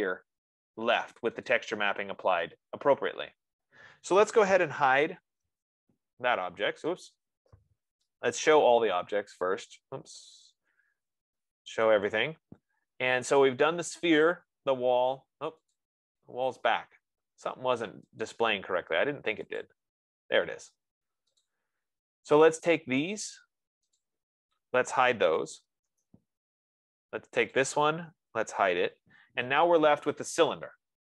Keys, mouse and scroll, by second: 0.9 F15, 2.0 click, 5.1-6.0 typing, 7.4 click, 8.4-9.4 typing, 10.2 Escape, 10.5 Escape, 11.0-11.9 typing, 17.6-18.6 scroll, 18.7 click, 20.1 click, 21.9 click, 24.5 click, 26.1 Return, 29.2 Return.